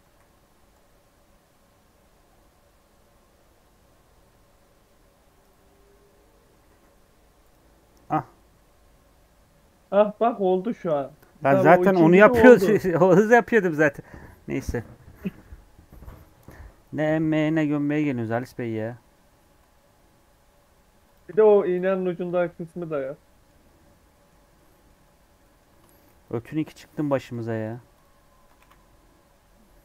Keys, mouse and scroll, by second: 0.0 c, 5.7 scroll down 1, 5.8 middle click, 6.7 e, 7.5 Tab, 7.8 scroll down 2, 8.0 middle click, 8.3 scroll up 2, 9.5 middle click, 10.5 scroll down 1, 10.6-13.6 middle drag, 22.8 scroll down 1, 23.0-24.9 middle drag, 24.9 Tab, 25.4 middle click, 25.9 shift+d, 26.9 p, 27.4 Tab, 27.6 click, 28.3 Tab, 28.5 a.